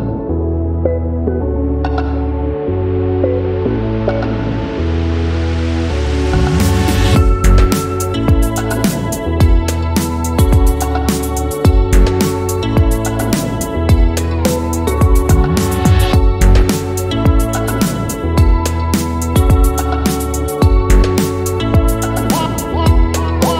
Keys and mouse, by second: 0.4 middle click, 0.8 shift+middle click, 1.4 1, 1.5 shift+z, 1.8 click, 2.4 s, 3.4 shift+middle click, 3.5 click, 3.9 g, 4.3 click, 5.0 click, 5.1 g, 6.2 click, 6.4 g, 7.2 click, 7.4 g, 8.2 Tab, 8.5 shift+z, 9.1 Tab, 9.4 ctrl+r, 10.7 shift+middle click, 10.9 ctrl+r, 12.2 Tab, 12.6 middle drag, 12.9-13.3 middle drag, 13.5 shift+middle click, 13.6 Tab, 13.9 middle click, 14.6 g, 15.5 g, 16.8 shift+middle click, 17.1 shift+middle click, 17.3 middle click, 17.6 shift+middle click, 17.8 middle click, 19.0 shift+middle click, 20.1 g, 21.2-23.5 typing, 21.9 shift+middle click, 22.4 shift+middle click.